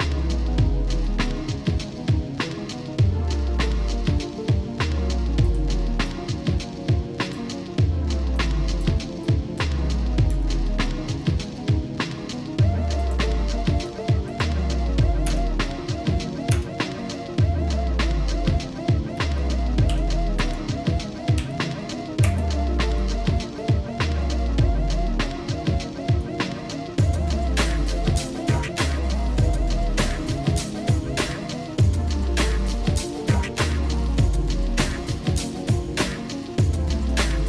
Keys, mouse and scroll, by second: 1.5 scroll up 1, 5.6 shift+click, 7.2-22.3 drag, 23.6 shift+middle click, 24.4-26.1 shift+middle drag, 27.1 scroll up 2, 27.7 scroll down 2, 28.5-32.5 shift+middle drag, 32.9-37.0 shift+middle drag.